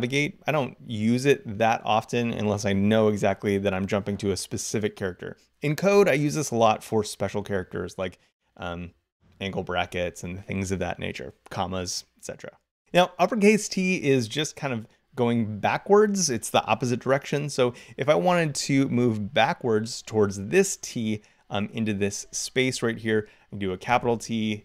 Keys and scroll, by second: 23.7 shift+t.